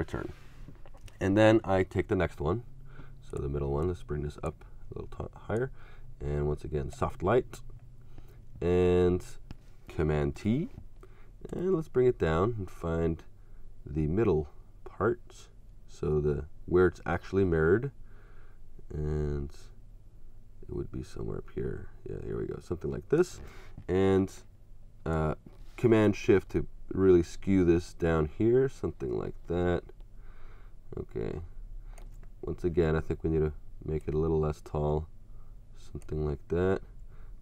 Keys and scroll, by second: 0.9 Return, 10.3 super+t.